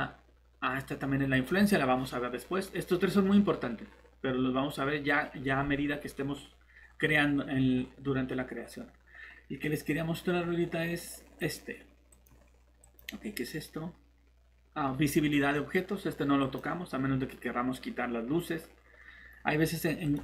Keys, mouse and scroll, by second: 6.8 Escape, 6.8 click, 7.7 scroll up 1, 11.4 click.